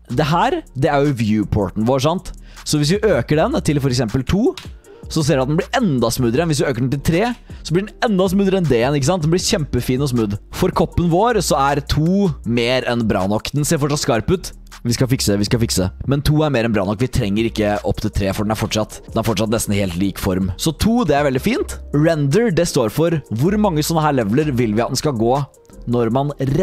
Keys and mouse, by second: 3.6-5.0 drag, 6.4-7.7 drag, 9.6 middle click, 10.7-12.8 drag, 16.3-18.9 drag, 19.1 middle click, 20.1-21.8 drag, 25.1 middle click.